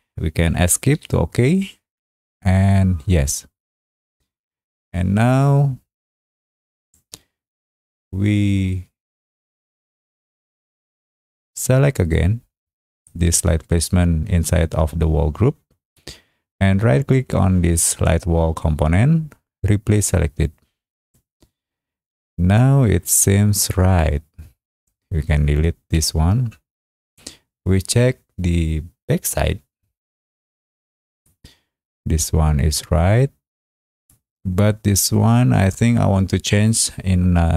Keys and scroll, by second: 0.9 Escape, 25.9 Delete.